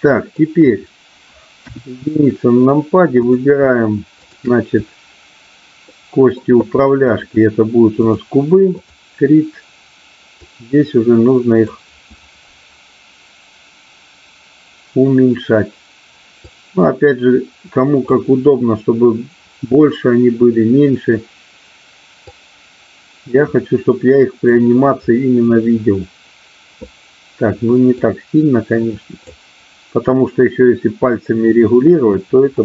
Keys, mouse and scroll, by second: 1.7 KP_1, 3.2 click, 4.2-5.3 drag, 5.9 shift+middle click, 7.0-8.2 drag, 8.7 click, 10.4-13.7 drag, 16.4-19.9 drag, 22.2-26.3 drag, 27.9-31.5 drag, 32.5-32.6 middle drag.